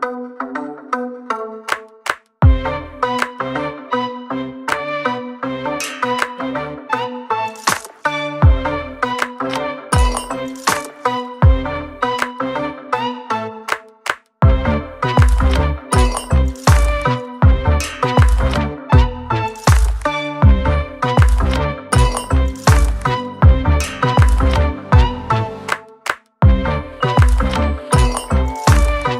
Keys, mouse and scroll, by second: 1.5 click, 3.8 n, 4.4 click, 10.3 click, 14.2 click, 15.2 click, 26.6 click.